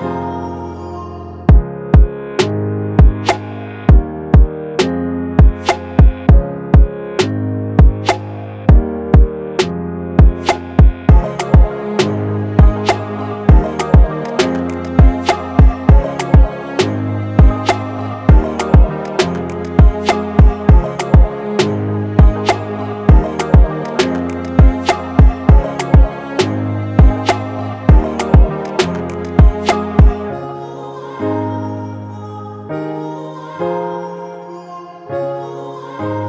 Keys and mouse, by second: 0.7-3.2 drag, 3.5-5.9 drag, 6.7-12.7 middle drag, 13.6-22.9 middle drag, 29.3-31.0 middle drag, 34.5-34.9 drag.